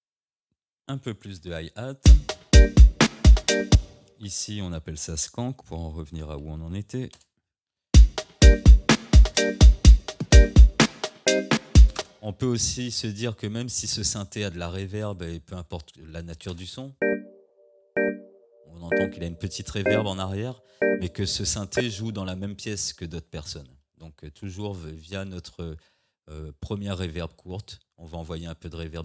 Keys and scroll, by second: 2.0 space, 3.7 space, 5.0 ctrl+r, 5.7-7.1 typing, 7.2 Return, 12.0 space, 16.5 space, 21.8 space.